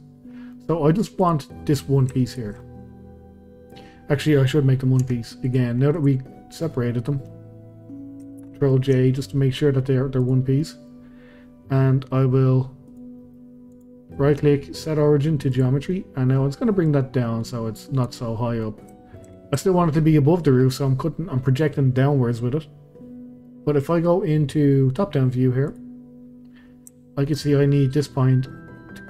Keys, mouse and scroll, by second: 0.2-0.5 scroll down 1, 0.5 middle click, 1.2 click, 1.5 middle click, 2.2 shift+click, 2.6-3.9 middle drag, 3.9-4.3 scroll up 1, 4.3 middle click, 4.7 scroll down 1, 5.0 Tab, 5.5 click, 5.9 click, 6.7-8.4 middle drag, 8.4 ctrl+j, 9.5-10.2 scroll up 1, 10.2 click, 10.6-11.5 middle drag, 11.5-11.9 scroll down 2, 11.9 middle click, 12.9 click, 13.2-13.7 middle drag, 13.7-15.9 right drag, 15.9-16.8 middle drag, 16.8 click, 18.3-19.3 middle drag, 19.3 scroll up 2, 19.6-20.0 shift+middle drag, 20.0-20.5 scroll up 2, 20.5-22.2 middle drag, 22.2 scroll down 2, 22.3-25.3 middle drag, 25.7 click, 26.2-26.9 scroll up 2, 26.9-27.4 shift+middle drag, 27.4-27.9 scroll up 2.